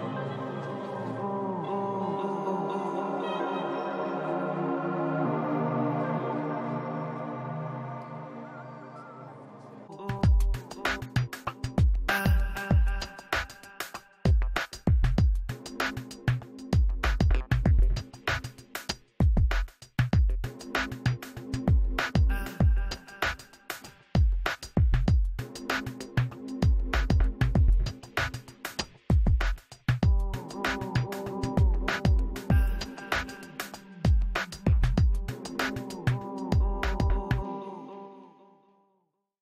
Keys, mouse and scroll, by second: 1.1 middle click, 1.1 f, 1.4-4.3 drag, 1.5 middle click, 2.2-3.4 middle drag, 3.9-4.9 middle drag, 4.6 shift+c, 4.7 f, 5.1 f, 5.3-12.8 drag, 6.1 f, 7.5-11.5 middle drag, 12.2-13.4 middle drag, 13.2 f, 13.5-15.3 drag, 15.3 middle click, 15.5-16.6 drag, 16.4 g, 16.6 middle click, 16.6 f, 17.4-18.9 drag, 18.0 middle click, 18.7-23.5 middle drag, 20.2 f, 20.5-27.1 drag, 22.8 f, 27.1-28.4 middle drag, 28.4 click, 29.2-30.9 middle drag, 30.8-31.9 typing, 31.0-32.3 middle drag, 32.0 click, 32.5 middle click, 32.7-34.3 middle drag, 35.4 ctrl+s.